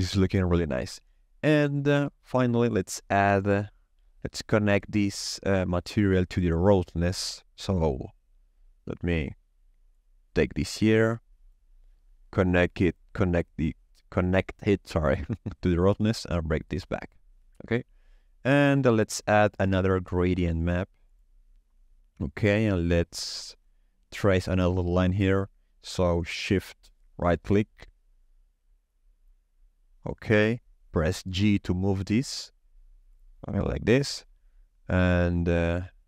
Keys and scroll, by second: 19.4 shift+a, 19.8 g, 20.0 r, 20.1 a, 31.2 g.